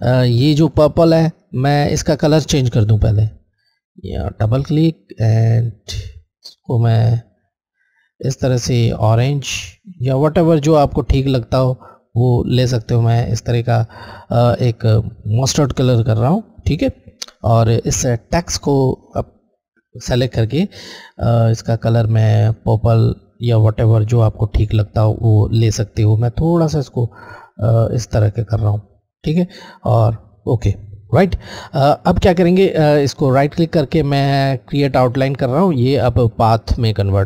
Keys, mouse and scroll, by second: 0.2 Left, 0.2 click, 2.8 click, 9.1 click, 9.9 click, 15.4 click, 20.4 Left, 26.4 click, 29.7 click, 32.9 Right, 35.0 click.